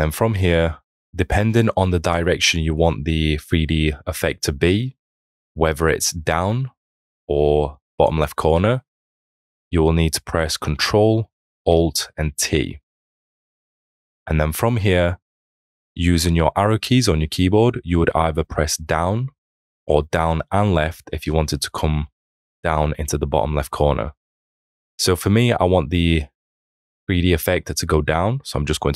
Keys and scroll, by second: 12.5 ctrl+alt+t.